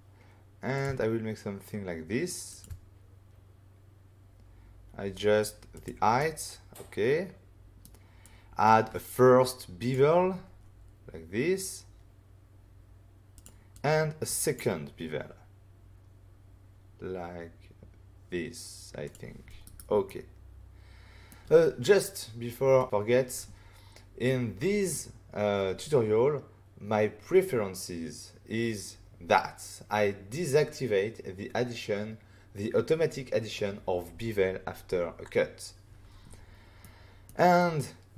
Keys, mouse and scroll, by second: 0.7 click, 0.8 click, 2.4 shift+click, 5.7 click, 5.8 click, 6.1 middle click, 8.2 click, 13.3 click, 13.7 click, 19.0 click, 19.6 click, 19.6 right click, 20.0 middle click, 36.8 middle click.